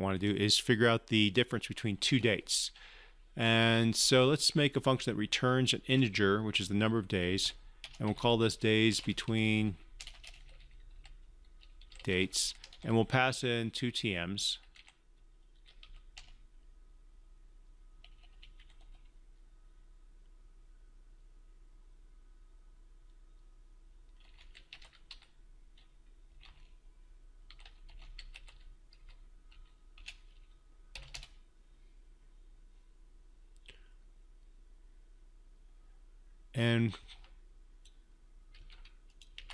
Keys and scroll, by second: 39.3 ctrl+c.